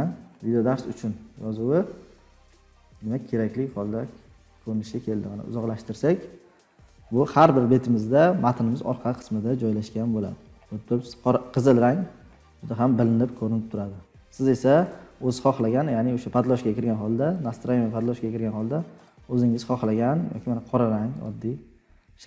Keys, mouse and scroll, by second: 0.6 scroll up 11, 1.1-1.6 scroll down 7, 2.3-2.9 scroll down 5, 3.5-3.9 scroll down 5, 4.2-4.7 scroll, 4.7-5.1 ctrl+scroll, 7.0-7.7 scroll, 8.7-11.4 scroll, 12.3 ctrl+scroll, 12.9-13.5 scroll, 14.8 click, 17.4 click, 19.0 scroll, 21.2 click.